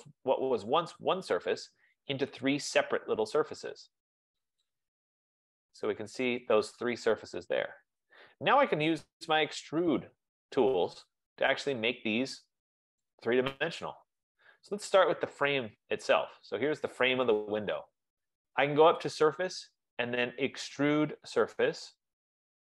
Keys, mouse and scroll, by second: 2.6 click, 4.9 click, 7.3 click, 10.1 right click, 10.5 scroll, 11.2-11.6 scroll, 14.1 right click, 16.1 click, 19.2 click.